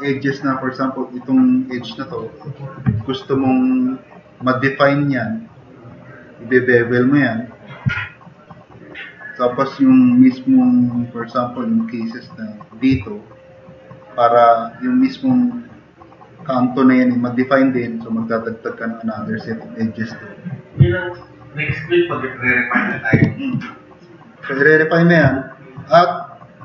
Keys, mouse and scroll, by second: 25.6 click, 26.0-26.4 drag.